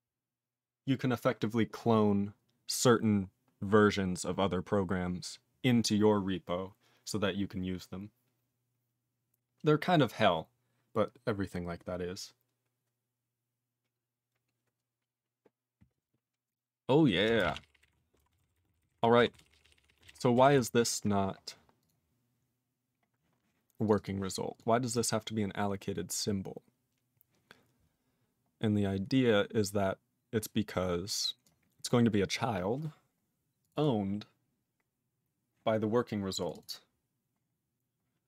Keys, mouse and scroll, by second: 17.4 ctrl+space, 17.4 ctrl+a, 17.5 ctrl+p, 17.6 ctrl+p, 17.7 ctrl+p, 17.8 ctrl+g, 17.9 ctrl+e, 18.3 ctrl+s, 18.4 ctrl+n, 18.6 ctrl+e, 18.7 ctrl+n, 18.8 ctrl+n, 18.9 ctrl+g, 19.3 ctrl+s, 19.4 ctrl+p, 19.5 ctrl+p, 19.6 ctrl+p, 19.8 ctrl+p, 19.9 ctrl+p, 20.0 ctrl+space, 20.0 ctrl+e, 20.1 ctrl+g, 20.5 ctrl+s, 21.8 click, 21.9 click, 22.6 scroll up 4, 23.9 click, 23.9 click, 23.9 double click, 24.0 double click, 24.6 click, 24.9 click, 24.9 click, 25.7 scroll down 4, 26.9-28.0 scroll down 1, 28.0-29.3 scroll down 9, 30.4-31.0 scroll down 2, 31.4 click, 31.9 click, 33.6 click, 33.7 click, 33.7 double click, 33.8 double click, 36.4 click, 36.5 click, 36.5 double click, 36.6 double click.